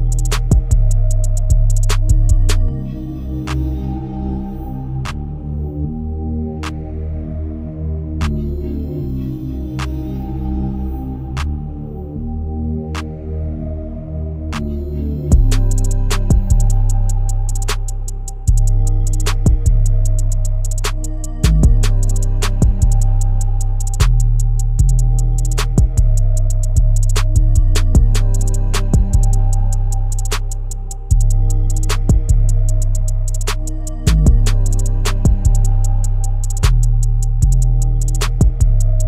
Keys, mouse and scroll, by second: 0.3 Tab, 1.9 e, 3.3 middle click, 4.0-4.4 scroll down 3, 4.4 middle click, 5.0 e, 7.3 e, 8.7 Tab, 9.1 click, 9.7-10.6 middle drag, 10.6-11.7 right drag, 11.7 click, 12.2 right click, 18.3 click, 20.2-20.9 drag, 21.5 click, 22.8 click, 23.4-25.7 middle drag, 25.9-26.7 right drag, 26.7 click, 27.1-27.8 right drag, 27.8-28.1 scroll down 1, 28.1-29.9 shift+middle drag, 29.9 Tab, 30.7 scroll up 1, 31.0 alt+click, 37.1 Tab, 37.7 KP_0, 38.5-39.0 middle drag.